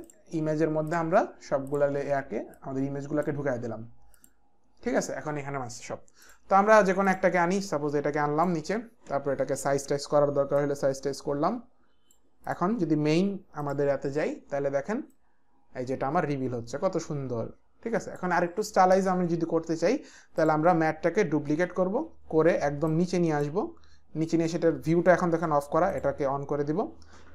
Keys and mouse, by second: 0.8 ctrl+click, 0.9 ctrl+click, 1.7 ctrl+click, 2.5 click, 4.2 click, 6.2 click, 7.7 click, 9.9 s, 10.6 click, 13.6 click, 15.1 click, 20.4 click, 21.6 ctrl+f, 21.6 ctrl+d, 22.9 click, 25.9 click.